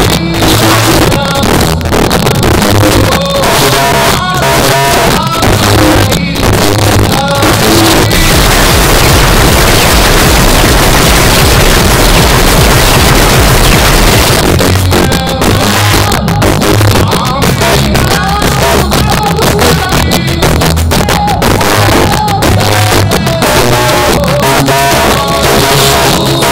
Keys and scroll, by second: 14.3 Page_Down.